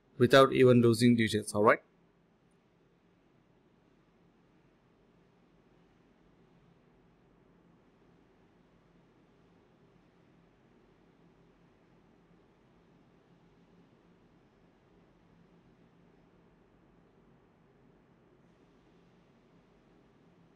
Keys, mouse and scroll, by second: 0.0 alt+click, 1.9-3.6 typing, 6.2 typing, 7.5 typing, 8.6 alt+click, 8.8 alt+click, 9.2-11.7 typing, 12.6 alt+click, 16.7 alt+click, 17.5 alt+click.